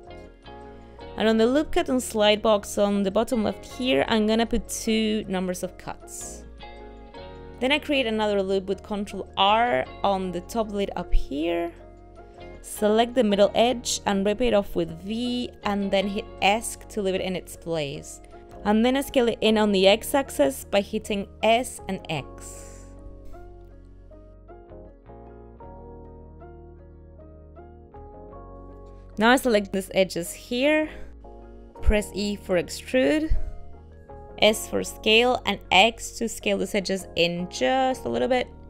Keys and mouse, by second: 2.8 click, 4.7 click, 9.1 ctrl+r, 12.5 click, 13.9 v, 16.3 middle click, 17.1 ctrl+middle click, 20.2 s, 23.6 shift+middle click, 24.0 middle click, 26.3 shift+middle click, 27.3 ctrl+middle click, 28.7 click, 30.1 shift+click, 31.8 e.